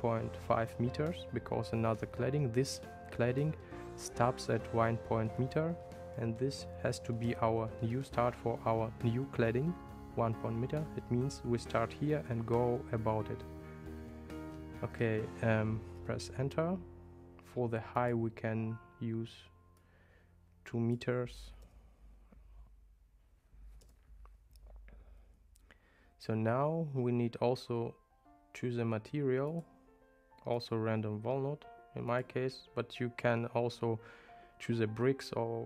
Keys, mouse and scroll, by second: 18.0-24.8 drag, 29.6-30.8 drag, 32.2-35.6 drag.